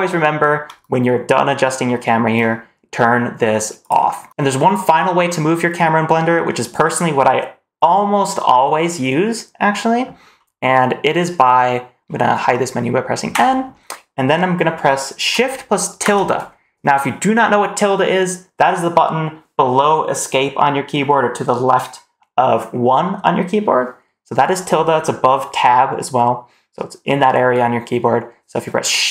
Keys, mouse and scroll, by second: 3.7 click, 13.2 n, 15.9 shift+`.